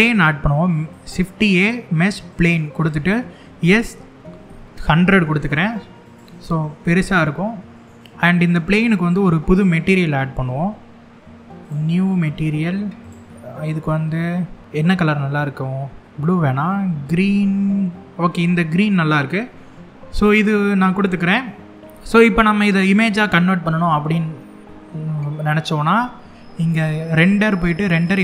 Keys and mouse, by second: 3.2 s, 3.6 KP_1, 3.9 KP_0, 5.7 click, 11.3 click, 26.7-28.2 drag.